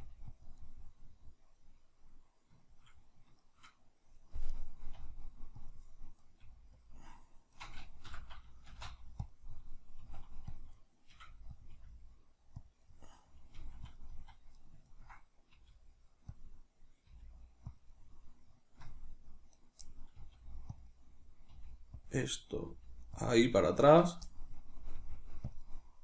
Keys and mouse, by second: 0.0 g, 0.5 click, 2.6-4.5 shift+middle drag, 4.5 right click, 4.9 g, 5.7 click, 6.2 right click, 6.4 g, 6.9 click, 7.5 right click, 8.1 l, 8.7 shift+d, 9.3 click, 10.0 middle click, 10.0 s, 10.5 click, 11.1 middle click, 11.1 g, 11.7 click, 11.7 r, 12.7 click, 13.5 middle click, 13.5 g, 14.0 click, 14.1 z, 14.5-17.7 middle drag, 15.5 g, 17.1 g, 17.8 click, 17.9-19.5 middle drag, 18.8 z, 19.5 right click, 20.2 middle click, 20.2 g, 20.8 click, 21.5 middle click, 21.5 g, 22.0 click, 22.6 middle click, 22.6 g, 23.2 click, 23.3 middle click, 24.0 right click, 24.9 middle click, 24.9 g, 25.5 click.